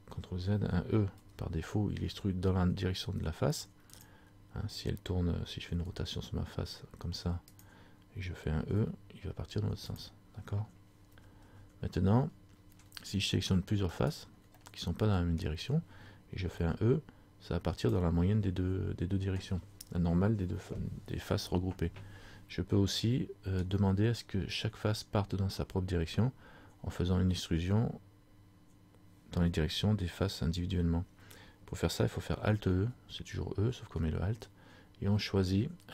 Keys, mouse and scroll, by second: 1.3 e, 4.1 click, 5.9 r, 9.0 e, 11.3 ctrl+z, 14.1 shift+right click, 14.7 middle click, 15.6-16.6 scroll down 1, 16.6 e, 23.1 middle click, 23.1 scroll up 1, 33.7 alt+e.